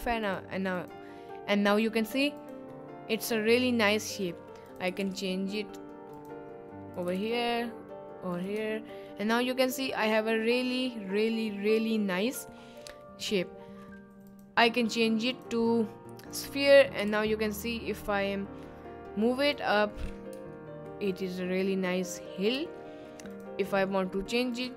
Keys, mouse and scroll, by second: 0.3 click, 1.9 middle click, 2.4 click, 2.7-3.3 middle drag, 4.1 Tab, 4.9 g, 5.3 z, 6.2 click, 7.1 g, 7.4 z, 8.3 click, 8.5 Tab, 9.2-9.6 middle drag, 9.9-10.5 middle drag, 12.2-12.5 middle drag, 12.9 middle click, 13.2 Tab, 13.2-13.7 scroll up 1, 14.2 click, 15.4-16.7 drag, 17.0 g, 17.1 z, 20.0 middle click, 20.3 Tab, 20.9 middle drag, 22.3 middle click, 22.6 Tab, 24.6-24.7 drag.